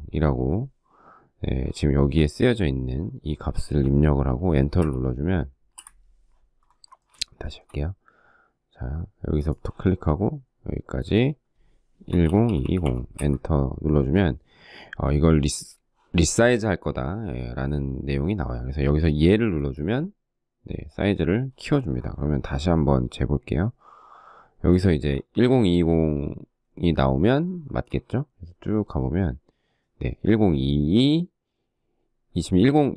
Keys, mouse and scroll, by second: 4.1 Return, 5.0 Return, 6.2 shift+middle click, 6.9 shift+middle click, 11.1-12.6 typing, 26.6 shift+middle click.